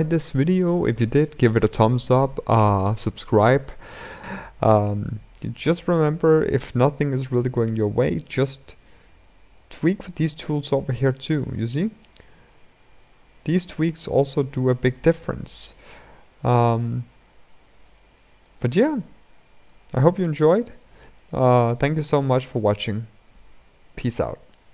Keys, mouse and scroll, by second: 4.2-5.5 middle drag, 5.5-7.0 drag, 7.0-7.4 scroll up 1, 7.4-8.7 middle drag, 8.7-12.1 drag, 12.1-14.0 middle drag, 14.0-14.6 scroll up 6, 14.6-15.4 middle drag, 15.4-16.3 scroll down 5, 16.3 scroll down 1, 16.5-19.6 drag, 19.6-20.2 scroll down 5, 20.2-24.7 middle drag.